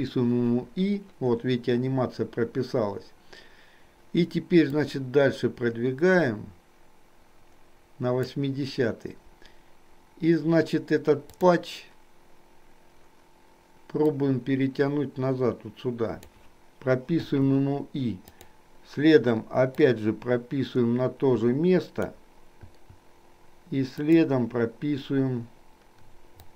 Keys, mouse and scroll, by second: 4.8-8.5 drag, 11.4 click, 14.2-16.5 drag, 17.4 i, 18.4 click, 19.9-22.2 drag, 22.8 i, 24.0 click.